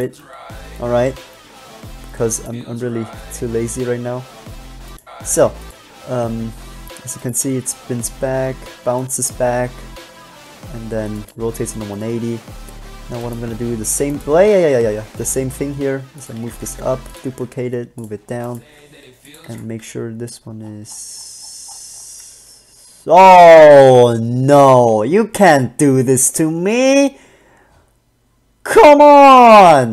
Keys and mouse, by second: 0.3 click, 0.5 middle click, 4.1 click, 5.5 middle click, 5.9 click, 7.7 click, 11.1 middle click, 13.9 shift+d, 15.3 g, 16.7 shift+d, 17.5 g, 18.9 g, 19.7 alt+a.